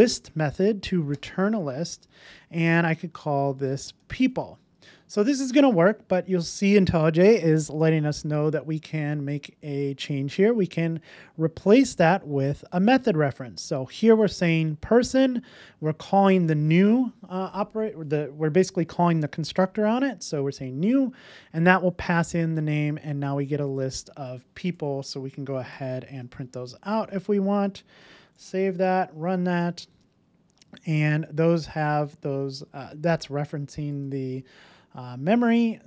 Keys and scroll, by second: 1.1 Return, 4.8 super+s, 26.1 Return, 28.0 super+s.